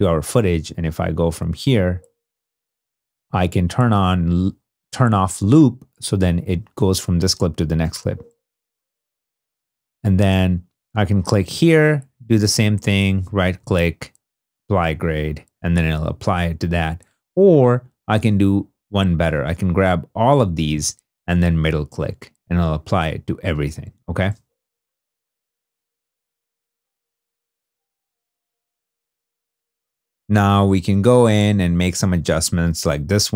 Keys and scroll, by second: 1.3 space, 7.6 space, 9.0 space, 24.0 space, 32.0 super+d.